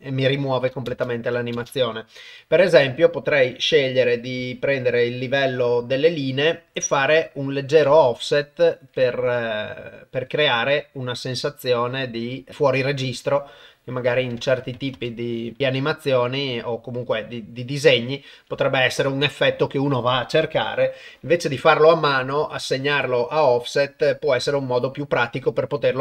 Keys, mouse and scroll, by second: 0.9 shift+space, 1.6 shift+space, 2.7 shift+Left, 3.4 click, 4.5-6.0 drag, 6.8-14.1 drag, 14.5 click, 15.4-18.3 drag.